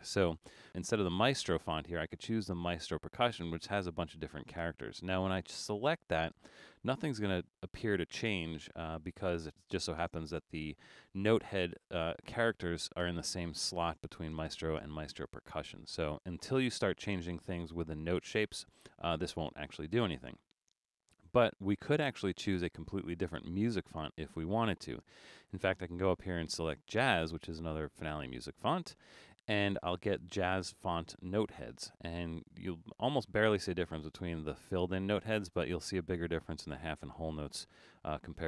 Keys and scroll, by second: 6.9 super+=, 7.4 super+=, 30.6 super+=.